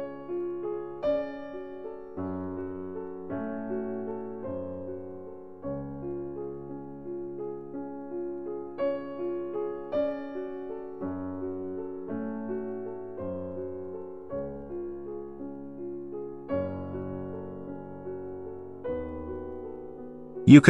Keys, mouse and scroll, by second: 5.3 click, 7.3 ctrl+z, 9.3 click, 9.8 click, 14.5 click, 16.2 click, 20.4 click.